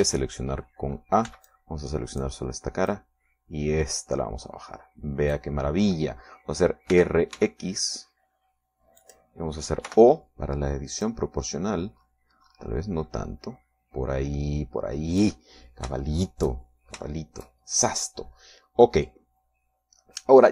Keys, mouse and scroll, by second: 1.4 a, 2.6 b, 2.8 click, 4.2-6.9 drag, 8.3 r, 8.7 x, 10.4 click, 11.2 o, 12.4 click, 13.2-13.6 scroll up 1, 13.8-14.7 scroll up 2, 15.0-15.3 scroll up 1, 17.4 shift+click, 18.4 shift+middle click.